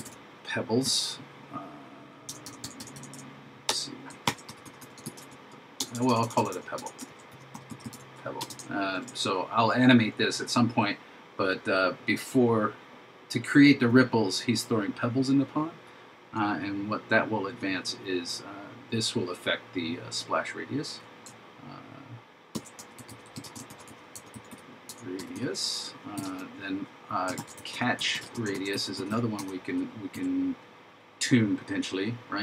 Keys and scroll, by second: 4.3 shift+t, 7.1 shift+p, 9.0 shift+9, 22.6 shift+s, 23.7 shift+r, 27.4 shift+c, 28.6 shift+r.